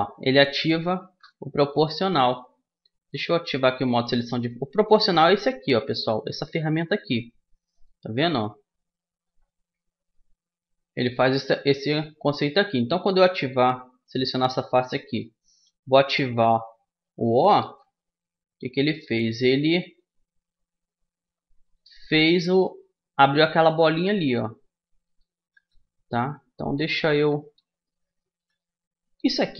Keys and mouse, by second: 0.3-2.4 drag, 1.8 a, 4.2-6.0 drag, 7.7-9.5 drag, 14.0-15.8 drag, 17.6 o, 20.0-21.7 drag, 26.4-29.5 middle drag.